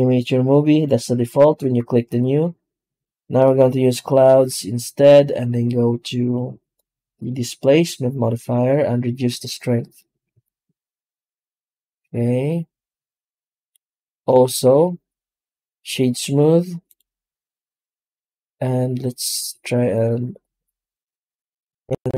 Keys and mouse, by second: 7.1 click, 8.8-9.9 drag, 10.3-13.6 shift+drag, 14.1 w, 19.3 z.